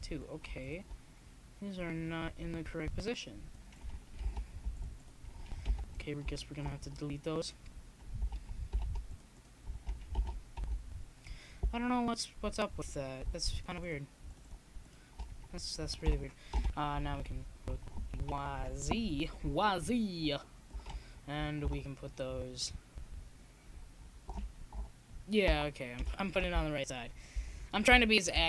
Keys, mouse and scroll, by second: 2.4-3.5 drag, 3.7 middle click, 5.6-6.8 middle drag, 6.8 KP_1, 7.7 z, 11.0-12.2 drag, 12.7 click, 13.0 s, 15.3-16.9 drag, 17.3-19.5 drag, 21.9 KP_7, 23.1-25.4 drag, 25.6 Tab, 27.2 Tab, 28.2-28.4 drag.